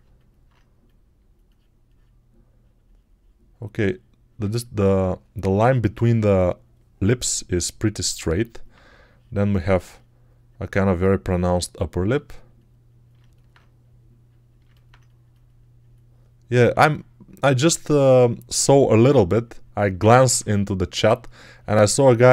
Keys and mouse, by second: 16.6 3.